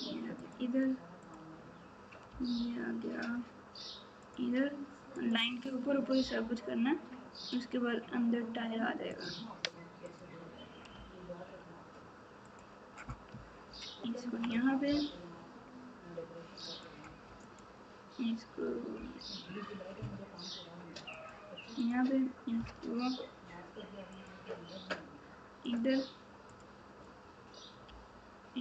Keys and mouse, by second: 5.2 click, 10.0 click, 14.2 ctrl+KP_4, 16.7 click, 17.4 click, 18.9 g, 21.8 click, 22.5 g, 25.6 click, 27.8 g.